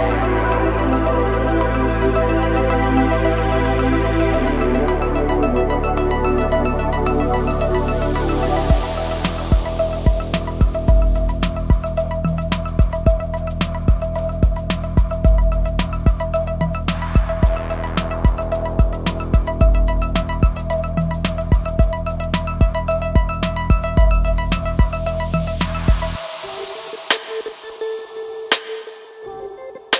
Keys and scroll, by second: 0.5 Escape, 0.9 r, 2.0 KP_9, 2.4 KP_0, 3.1 Return, 17.8 g, 20.8 Tab.